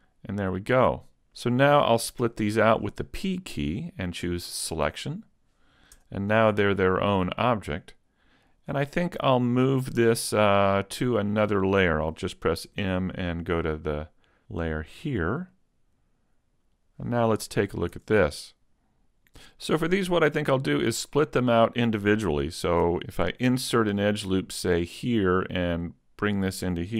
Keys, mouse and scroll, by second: 0.7-1.3 scroll down 1, 2.2 p, 6.0 Tab, 6.6 right click, 7.2 middle click, 12.7 m, 16.7 click, 17.6 middle click, 18.0 Tab, 18.4 middle click, 19.7 middle click, 21.4-22.4 scroll up 2, 22.4 middle click, 23.2 ctrl+r, 26.4 click.